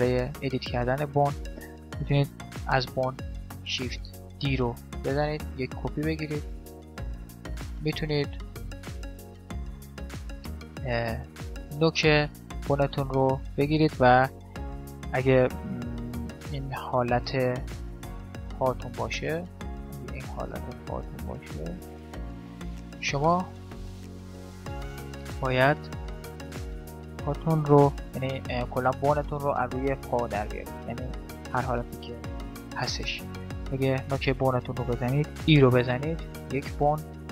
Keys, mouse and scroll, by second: 3.0 shift+d, 6.4 shift+d, 8.0 x, 8.8-12.8 right drag, 8.9 x, 11.8 middle click, 12.6-15.0 middle drag, 15.0-15.6 scroll down 1, 15.9 KP_5, 16.2 KP_1, 17.4-20.2 d, 17.6-19.6 drag, 20.2-22.0 drag, 22.2 d, 22.2 d, 24.6-26.4 right drag, 27.6 middle click, 28.3-30.0 right drag, 31.2-33.2 middle drag, 32.3 KP_1, 33.4-35.4 right drag, 35.4 e.